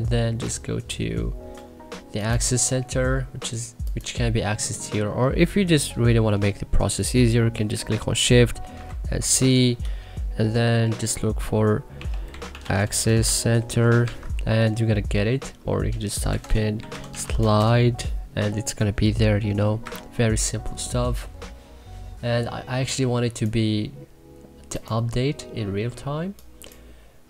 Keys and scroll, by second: 8.7 shift+c, 11.7-13.7 typing, 14.0 Escape, 16.0-17.7 typing, 19.8 Escape.